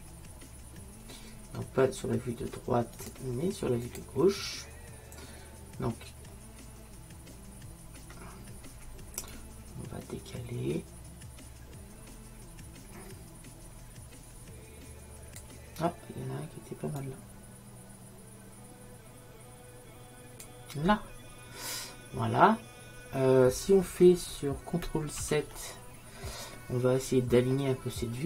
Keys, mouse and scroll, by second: 3.0-5.7 drag, 9.4-11.1 drag, 22.1-24.8 middle drag, 25.3 ctrl+n.